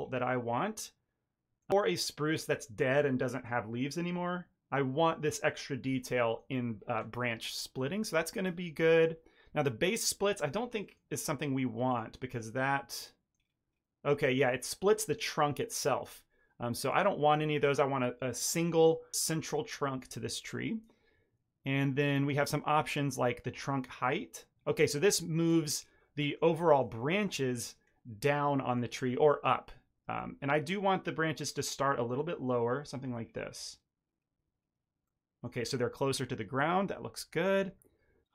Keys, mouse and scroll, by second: 0.3 middle click, 6.1 middle click, 6.5-6.9 scroll up 2, 8.7 middle click, 8.7-9.2 scroll up 1, 10.8 middle click, 11.8 click, 12.3-13.3 scroll down 2, 12.6 middle click, 13.3-13.9 scroll down 5, 13.9 scroll up 1, 14.2 shift+middle click, 14.6-15.4 scroll up 2, 16.8 click, 22.0 middle click, 23.5 shift+click, 25.8-26.1 scroll down 2, 26.1 middle click, 26.6 shift+middle click, 26.9 ctrl+middle click, 27.3 shift+middle click, 27.5 middle click, 30.1 shift+click, 33.1-34.0 scroll down 1, 34.0 scroll down 2, 34.0-34.5 scroll up 2, 35.0 middle click, 35.0 scroll up 1.